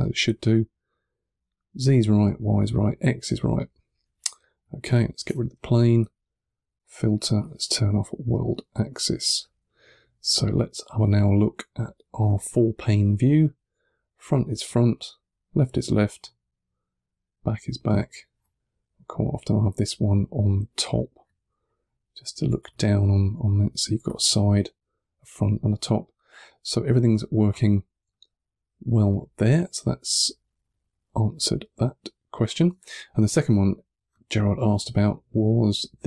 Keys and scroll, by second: 5.1 BackSpace, 12.3 1, 21.4 2, 22.5 1, 23.3 2, 25.8 2, 27.6-28.5 typing.